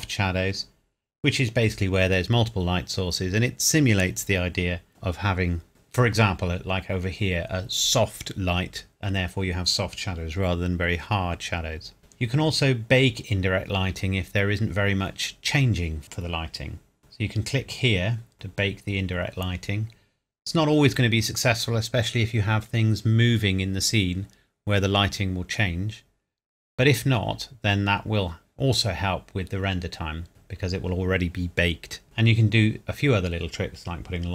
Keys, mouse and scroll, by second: 12.0-12.4 scroll down 1, 12.6-14.8 scroll down 1, 16.1 scroll down 1, 18.3 click, 25.9 scroll up 1, 29.3 scroll down 1, 32.2 scroll down 1.